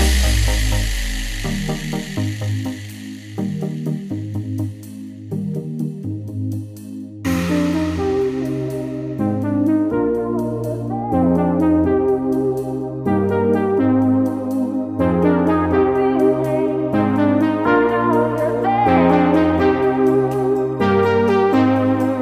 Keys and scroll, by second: 1.0 ctrl+z, 7.2 ctrl+z, 13.2 ctrl+z, 13.8 ctrl+space.